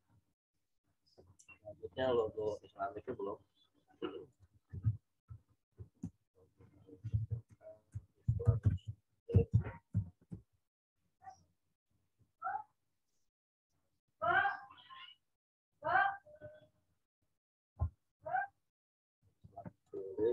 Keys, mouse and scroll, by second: 3.2-4.3 scroll up 1, 4.3 click, 4.6 ctrl+a, 5.2-10.4 typing, 13.1 click, 14.3 right click, 15.7 click, 18.4 ctrl+v, 19.4 w, 19.8 click.